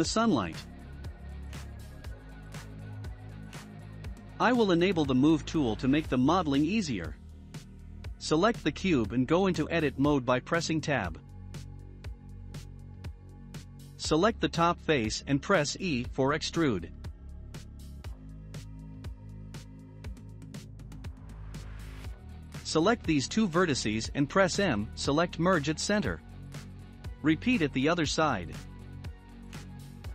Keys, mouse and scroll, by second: 1.6 click, 3.5-6.5 drag, 6.8-7.5 middle drag, 7.5-8.4 scroll up 9, 8.4-13.7 middle drag, 9.9-10.4 scroll up 5, 11.8 Tab, 13.7-14.9 drag, 14.9 KP_Decimal, 15.8-16.6 scroll down 5, 16.6-17.9 middle drag, 17.9 e, 20.8 shift+middle click, 21.7 1, 22.4 click, 23.2 shift+click, 25.8-27.5 drag, 27.5 shift+m, 29.3-30.1 shift+middle drag.